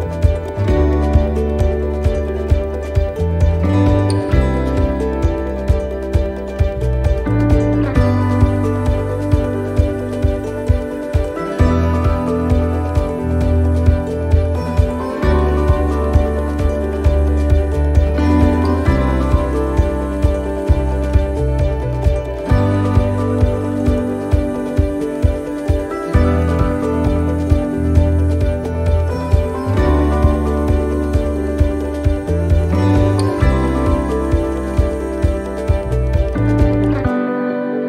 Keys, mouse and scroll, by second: 1.2 middle click, 1.5 shift+right click, 2.1 middle click, 3.1 click, 5.6 middle click, 16.3 click, 16.3 s, 17.8 middle click, 20.8 click, 22.1 middle click, 25.7 click, 26.8 middle click, 28.7 middle click, 29.0 click, 30.1 middle click, 31.0-31.5 scroll down 2, 31.4 middle click, 32.4 scroll up 2, 33.0 middle click, 35.4 right click, 36.3 click.